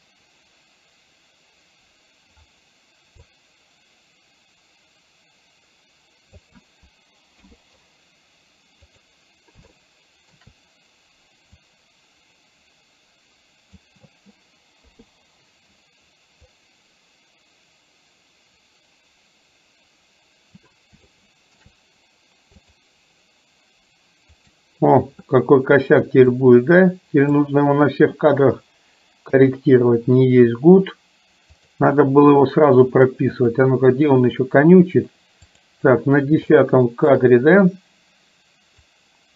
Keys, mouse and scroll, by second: 3.5-6.5 drag, 9.0 click, 9.8 shift+middle click, 11.8-13.9 drag, 14.9 i, 16.7-20.7 drag, 21.2 shift+middle click, 22.8 click, 24.5 click, 26.5-27.5 drag, 29.4 i, 31.7 click, 33.5 click, 35.5 click, 36.5 shift+middle click, 38.8-39.3 drag.